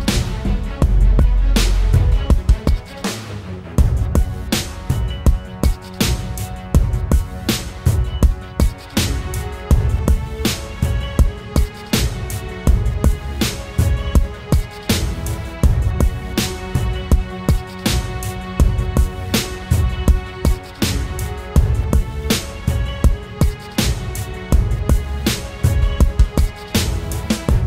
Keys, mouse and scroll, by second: 3.6 Up, 4.7 Up, 4.9 Up, 5.3 Return, 12.5 ctrl+t, 13.8 ctrl+click, 15.7 alt+shift+click, 19.5 Left, 19.7 Up, 20.3 Up, 20.8 Return, 22.2 Right, 22.6 Left, 22.8 Right, 23.2 Left.